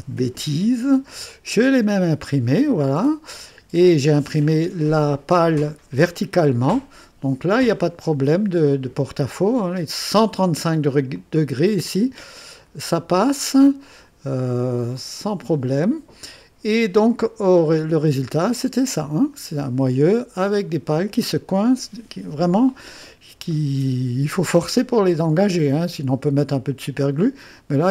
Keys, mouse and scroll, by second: 3.0 click, 4.5-9.2 drag, 11.1 click, 11.9-14.1 drag, 15.0-16.9 drag, 17.7 click.